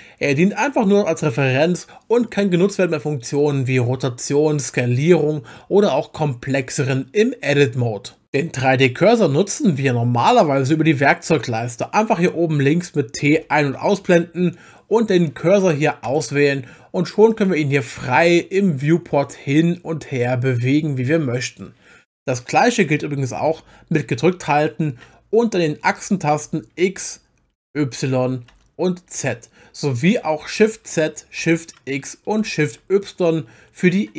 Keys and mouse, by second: 13.3 t, 13.7 t, 16.0 click, 17.3 click, 23.9-30.6 drag, 26.5 x, 27.6 y, 28.5 z, 30.6 shift+z, 30.6 shift+click, 31.4 shift+x, 32.4 shift+y.